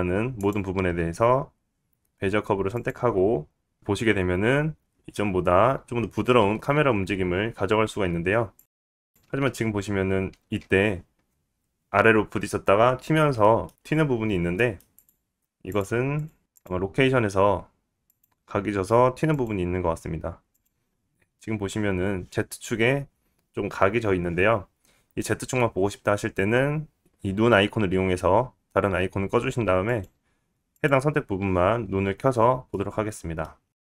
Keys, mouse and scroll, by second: 1.6 right click, 3.0 right click, 3.4 click, 3.5 space, 7.5 space, 7.7-8.6 scroll down 5, 8.6 middle click, 9.1 middle click, 9.1 space, 9.4 space, 10.7 click, 11.4 space, 12.5 space, 14.6 middle click, 14.6 scroll down 2, 14.8 middle click, 14.8 scroll up 5, 15.1 click, 15.9 click, 15.9 right click, 16.4-16.9 drag, 17.0 click, 17.0 right click, 17.9 click, 18.7 click, 20.2 click, 21.4 click, 21.5-22.7 right drag, 22.7 click, 22.8 right click, 23.4-25.8 scroll up 3, 25.8-27.1 right drag, 27.1 click, 32.0 click, 32.1-32.9 right drag, 32.9 click, 33.0-33.9 right drag.